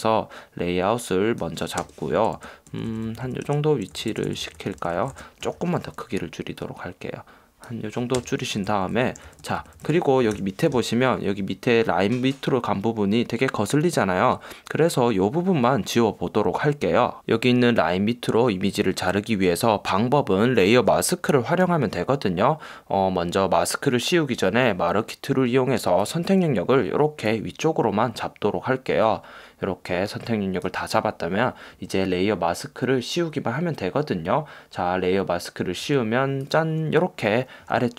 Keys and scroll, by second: 2.0 Return, 2.3 shift+Left, 2.8 shift+Down, 3.6 shift+Right, 4.1 Left, 4.9 Up, 5.3 Left, 5.7 super+t, 8.3 Return, 8.7 Left, 9.1 shift+Up, 9.4 Down, 10.0 Left, 10.5 super+=.